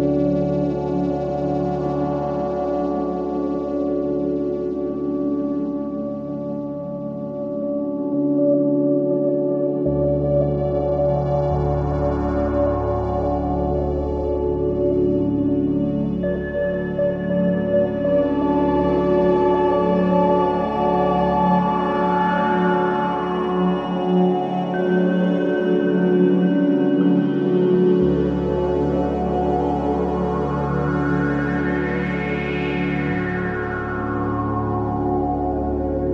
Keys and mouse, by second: 0.9 click, 1.9 typing, 3.4-5.3 drag, 5.7 click, 6.6 click, 7.0 click, 7.8-9.6 typing, 8.9-12.3 drag, 12.9 Tab, 13.6-17.9 ctrl+alt+drag, 18.1 click, 19.4 click, 21.5 click, 23.3-24.4 alt+drag, 24.8 ctrl+s, 24.8 typing, 25.5-26.4 ctrl+alt+drag, 26.5 click, 27.1 drag, 28.2-30.3 drag, 31.4-32.2 drag, 32.6-33.8 alt+shift+drag, 34.1-34.5 ctrl+alt+drag.